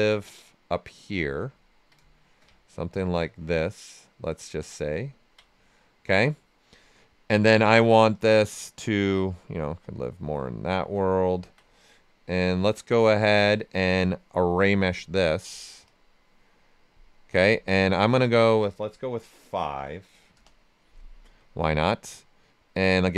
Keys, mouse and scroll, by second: 1.5 ctrl+right click, 2.5-4.9 ctrl+shift+right drag, 9.3 click, 10.3 right click, 11.1 ctrl+right click, 14.5 click, 19.7 5, 20.3 Return, 23.0 click.